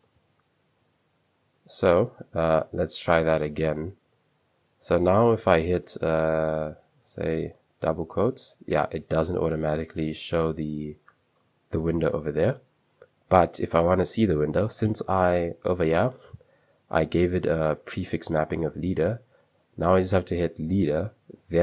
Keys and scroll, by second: 0.0-1.6 typing, 3.3-4.1 typing, 8.8-10.4 typing, 12.2 typing, 15.7 super+2, 17.0-17.5 typing, 19.5 super+3.